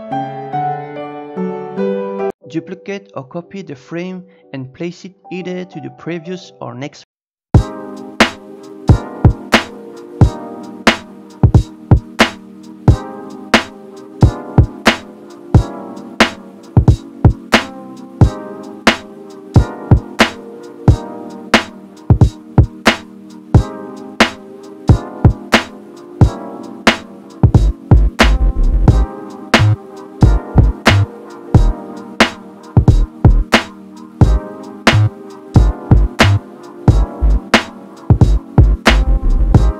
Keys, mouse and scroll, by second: 0.1 click, 0.7 n, 0.9-2.2 shift+middle drag, 2.2 click, 5.0 shift+d, 7.2-8.2 drag, 8.2-11.3 shift+middle drag, 11.7 Tab, 11.7 middle click, 12.7 a, 14.7 g, 20.8 scroll up 1, 21.4-22.4 shift+middle drag, 22.4 scroll up 2, 22.7 click, 23.5 click, 25.0 scroll down 2, 25.5 shift+middle click, 26.0 scroll up 3, 27.3 click, 29.6 l, 30.2 g, 32.4 scroll up 2, 33.2-33.6 scroll up 2, 33.6 click, 35.6 g, 37.2 r, 39.2 g.